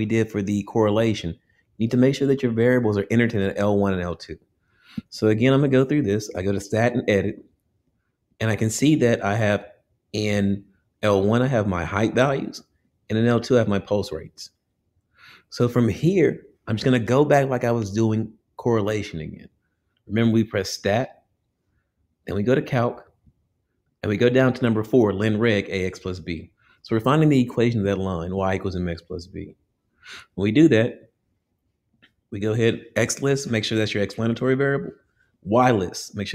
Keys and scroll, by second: 7.9 Return, 23.3 Right, 28.4 Down, 31.0 Return.